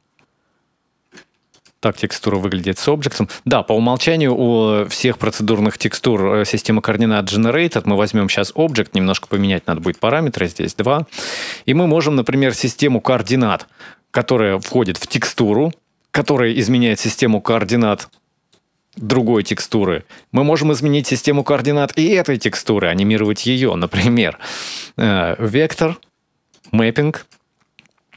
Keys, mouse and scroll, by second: 1.3 ctrl+shift+click, 7.3 click, 9.0 click, 11.4-12.1 scroll down 1, 12.1 scroll down 2, 12.2 middle click, 15.1 click, 17.9 middle click, 19.0 click, 19.6 middle click, 20.9 click, 21.4-22.1 scroll up 1, 22.1 scroll up 2, 22.2 middle click, 22.8 click, 24.3 shift+a.